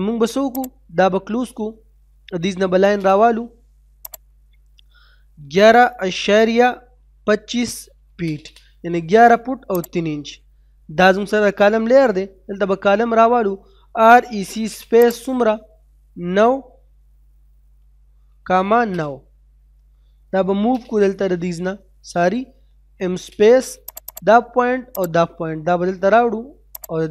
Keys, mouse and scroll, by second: 1.2 middle click, 1.6-1.9 scroll up 1, 1.9 middle click, 2.6 l, 3.0 space, 3.1-3.6 scroll up 1, 4.1 click, 5.4 1, 8.2 space, 10.0 click, 11.7 middle click, 12.1-12.9 scroll down 1, 14.0-14.7 typing, 15.0 click, 17.8 9, 18.9 space, 20.5 n, 20.7 space, 23.3 space, 24.1 right click, 25.0 click.